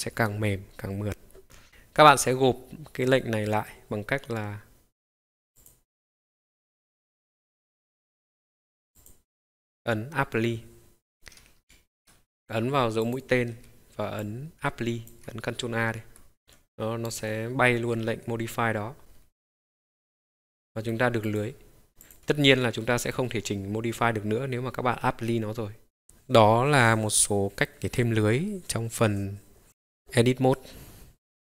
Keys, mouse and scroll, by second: 5.6 click, 11.7 ctrl+z, 13.0-16.4 drag, 17.1 click, 17.7-18.8 scroll up 2, 19.0-19.5 scroll down 2, 19.5-20.9 middle drag, 21.2 click, 22.0 click, 22.8 middle click, 26.0 click.